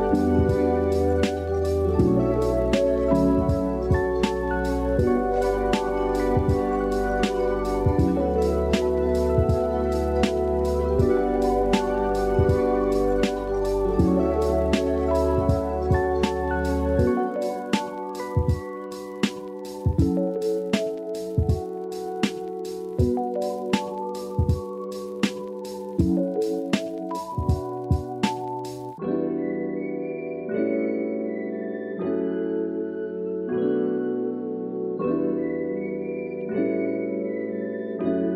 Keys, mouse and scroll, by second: 0.4 click, 1.7 middle click, 2.1 Tab, 2.3 click, 2.7 KP_1, 2.9 alt+z, 3.4 alt+z, 3.9 Tab, 5.4 Tab, 6.5 ctrl+s, 9.2 KP_1, 10.7 shift+middle click, 11.0 Tab, 11.4 click, 11.8 KP_3, 12.8 Tab, 14.2 shift+click, 14.5 shift+click, 15.2 alt+z, 16.0 shift+click, 18.7-21.0 drag, 21.0 Tab, 21.4 middle drag, 21.8 alt+z, 22.0-23.3 middle drag, 23.6-24.3 middle drag, 24.5-25.7 middle drag, 26.5 KP_1, 26.7 Tab, 27.1 alt+z, 27.5-28.8 shift+drag, 37.2 ctrl+z, 37.8 Tab.